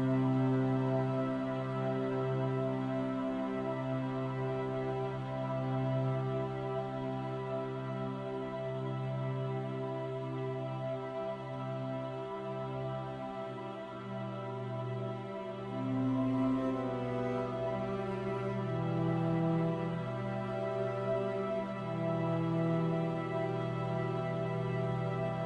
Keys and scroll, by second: 8.2 ctrl+t.